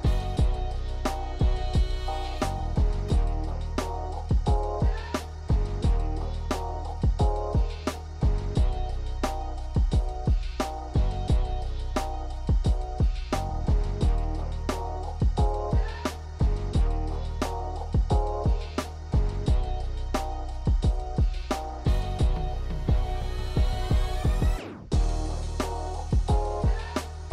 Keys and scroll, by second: 9.3 KP_1, 12.9 KP_1, 16.4 shift+d.